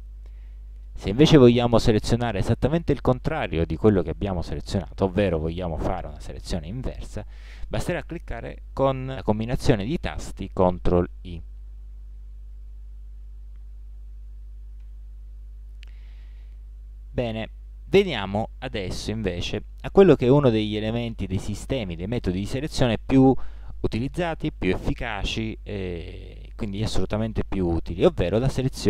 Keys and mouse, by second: 6.3-7.7 middle drag, 12.8 ctrl+i, 14.3 middle click, 14.9 a, 18.1 middle click, 20.1-23.7 middle drag.